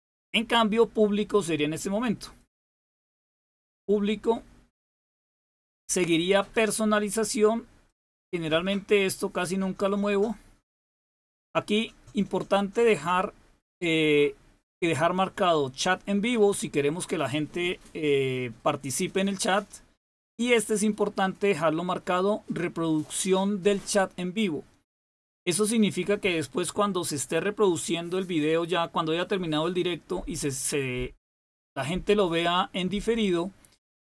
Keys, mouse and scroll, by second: 0.0 click, 2.3 click, 4.9 click, 7.8 click.